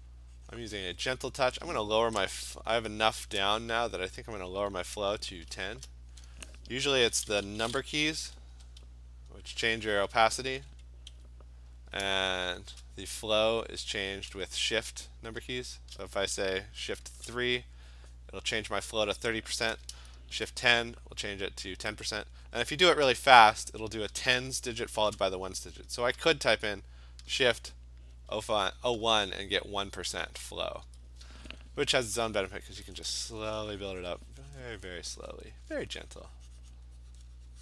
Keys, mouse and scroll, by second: 0.1 click, 0.4 click, 1.0 click, 5.5 `, 8.5-11.6 typing, 14.6-17.1 typing, 20.5 !, 35.2 click, 36.2 click, 36.4 click.